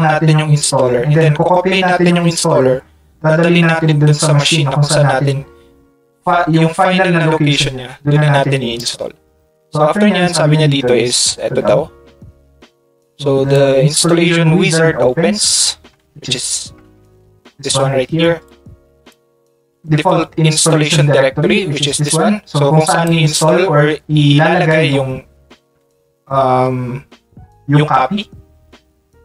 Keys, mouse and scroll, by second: 8.8 click, 10.1 middle click, 11.1 middle click, 12.0 middle click, 12.6 middle click, 13.5-15.4 drag, 16.9 Tab, 18.5 click, 18.8 click, 22.1-23.1 drag.